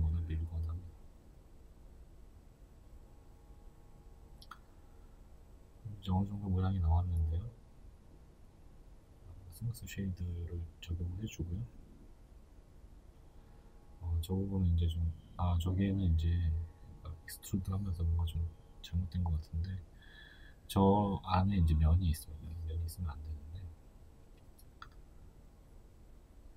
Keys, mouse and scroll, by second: 2.0 scroll, 2.6 Tab, 3.0-13.1 middle drag, 5.0 z, 6.6 scroll up 1, 8.3 w, 12.4-12.8 scroll up 2, 13.1 right click, 13.3 Tab, 13.8 middle click, 14.3 alt+right click, 14.5 alt+right click, 15.6 alt+shift+right click, 16.2 middle click, 16.7 right click, 17.3 shift+right click, 17.7-19.4 middle drag, 18.8-19.4 scroll down 1, 19.4 shift+right click, 19.8 shift+right click, 20.2-26.5 middle drag.